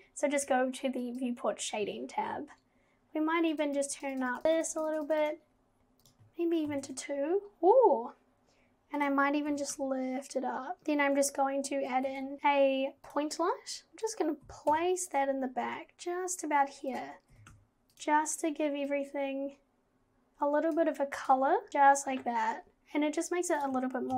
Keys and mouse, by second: 1.1 click, 3.5 click, 3.8 click, 4.0 click, 4.3 click, 4.6 click, 4.9 click, 6.0 click, 9.5 g, 10.8 ctrl+z, 10.8 shift+d, 12.1 shift+a, 13.9 g, 14.4 g, 17.3 g, 18.9-20.9 drag, 21.2 click, 23.8 click.